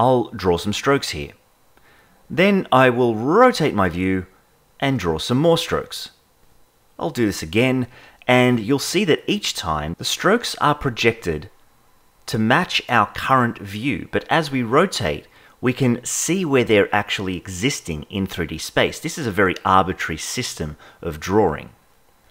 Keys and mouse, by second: 0.2 click, 1.1 click, 3.5-5.0 shift+middle drag, 5.0 click, 5.9 click, 6.7 click, 8.1-11.0 shift+middle drag, 11.0 click, 11.9 click, 12.6 click, 13.4 click, 14.7-18.1 shift+middle drag, 19.4 click, 20.3 click, 21.9-22.3 shift+middle drag.